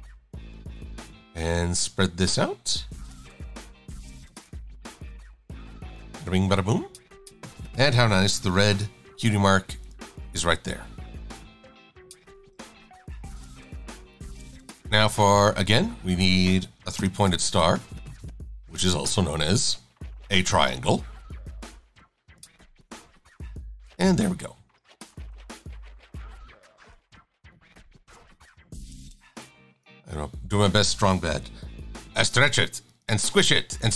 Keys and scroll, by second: 20.6 e.